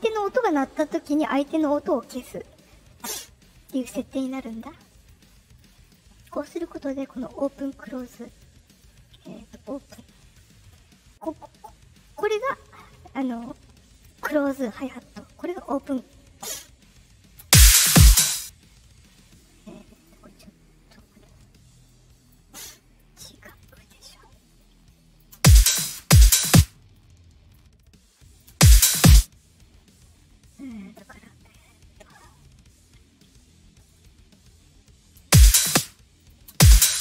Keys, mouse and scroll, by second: 4.9 click, 5.7 click, 7.8 click, 8.2 click, 8.6 click, 12.0 right click, 12.2 right click, 13.5 middle click, 15.5 right click, 15.6 right click, 17.3 space, 18.2 space, 19.9 click, 21.8 click, 23.5 click, 24.5 click, 25.3 space, 25.7 space, 25.9 space, 26.4 space, 26.9 click, 27.7 click, 28.4 space, 29.0 space, 30.1-30.4 scroll down 2, 31.2 right click, 33.7 right click, 33.9 right click, 34.4 middle click, 34.4-34.8 scroll up 1, 35.2-37.0 typing, 36.1 click.